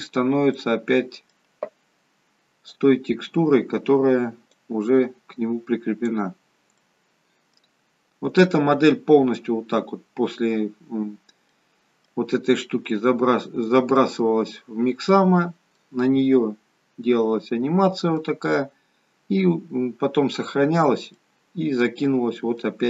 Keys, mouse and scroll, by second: 0.0-1.1 scroll down 3, 1.1 middle click, 4.3 click, 6.6 middle click, 7.6-8.2 scroll down 2, 9.1 middle click, 9.7-10.2 scroll up 2, 11.5 middle click, 12.9 middle click, 14.4-15.1 scroll down 1, 15.1-15.7 scroll up 1, 15.7 middle click, 18.7-19.3 scroll down 1, 21.1 middle click.